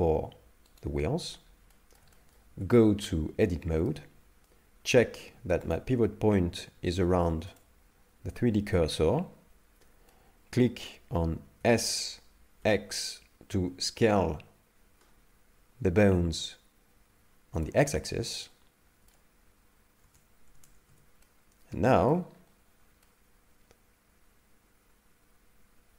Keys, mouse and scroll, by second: 0.8 shift+right click, 1.4 scroll down 2, 1.7 shift+middle click, 2.1 middle click, 2.5 Tab, 3.0 middle click, 5.7 click, 10.1 middle click, 11.6 s, 18.3 middle click, 20.9 Tab, 21.2 middle click, 22.3-22.8 scroll up 2, 22.8 scroll down 1, 23.0 middle click.